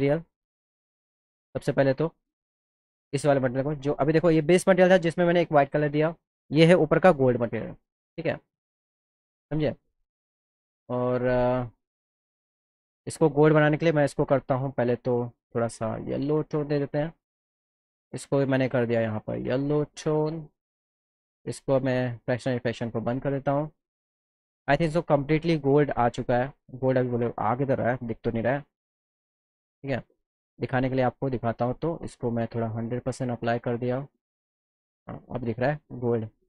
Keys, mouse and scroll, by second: 1.5 click, 1.7 click, 3.7 click, 6.9 click, 8.5 click, 10.3 click, 11.7 click, 13.2 click, 14.8 click, 15.9 click, 17.3 click, 18.2 click, 19.8 click, 21.4 click, 25.3 click, 26.7 click, 27.9 click, 29.1 click, 30.3 click, 33.4 click, 35.5 click.